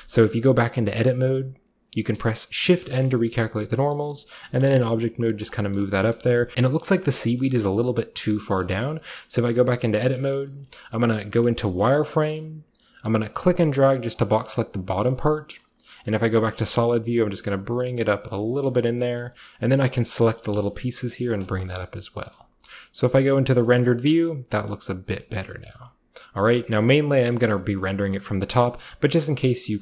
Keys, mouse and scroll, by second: 0.6-1.1 shift+scroll up 1, 3.2 shift+middle click, 3.4 shift+scroll, 4.2 typing, 5.4 drag, 5.9 typing, 6.3-6.8 drag, 7.0 middle click, 7.2 middle drag, 7.7-8.5 middle drag, 8.6 middle click, 8.9 Tab, 9.2 scroll down 2, 10.6-12.1 typing, 12.4 middle click, 13.3-15.1 drag, 15.1 middle click, 16.0-17.8 scroll up 1, 16.0-16.4 typing, 16.1-17.8 middle drag, 17.8-18.7 typing, 18.5-20.0 drag, 19.9-22.4 typing, 21.3 click, 21.5 scroll down 1, 23.8-24.5 scroll up 1, 23.9-24.5 middle drag, 24.5 scroll down 1, 24.8-25.2 middle drag, 25.1 scroll down 1, 25.4 middle drag, 25.8 shift+middle drag, 26.6 middle drag, 26.9-27.2 middle drag, 27.2-28.8 scroll up 1, 27.3 shift+middle drag, 27.5 shift+middle drag, 27.9-28.4 middle drag, 28.8 middle drag, 29.2-29.8 middle drag, 29.2-29.8 scroll up 1.